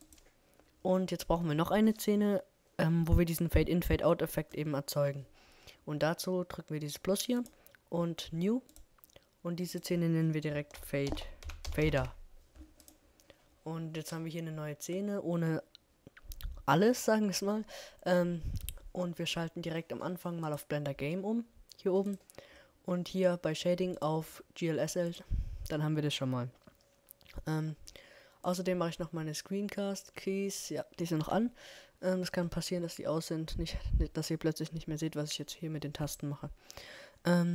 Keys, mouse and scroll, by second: 1.0-2.9 drag, 3.3-5.6 drag, 7.7-10.7 middle drag, 15.1-17.3 drag, 18.9-21.1 drag, 23.6-25.9 drag, 26.7 n, 30.7-33.3 middle drag, 35.2-37.1 drag.